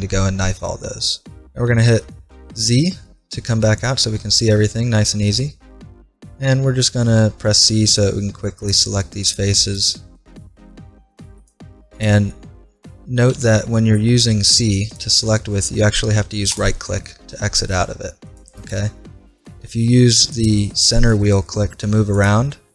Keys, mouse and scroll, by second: 1.7 ctrl+Tab, 2.5 z, 3.2-5.0 middle drag, 7.1 c, 9.8-11.8 right drag, 10.9 c, 12.0-14.2 right drag, 13.3 c, 16.6-18.4 right drag, 17.1 click, 17.9 c, 18.8-20.9 middle drag, 19.6 c.